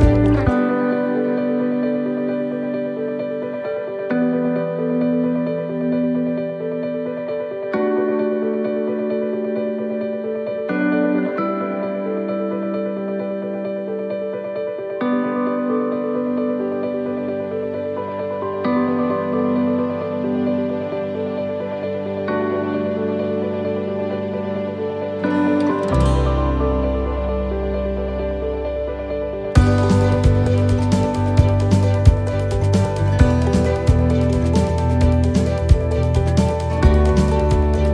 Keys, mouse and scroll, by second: 0.9 right click, 1.4 alt+shift+right click, 2.4 e, 2.9 s, 13.4 middle click, 13.6-14.2 scroll down 3, 14.3 shift+middle click, 15.7 middle click, 16.2-16.7 scroll down 1, 16.7 middle click, 17.3-18.1 scroll up 4, 18.3 shift+middle click, 20.2 shift+middle click, 21.0-21.3 scroll down 2, 21.4 shift+middle click, 21.9 middle click, 23.2 right click, 24.6 click, 25.1-25.4 scroll up 2, 26.2 right click, 26.6 shift+right click, 27.5 shift+right click, 28.1 right click, 28.1 middle click, 28.5-29.2 scroll down 2, 29.4 shift+middle click.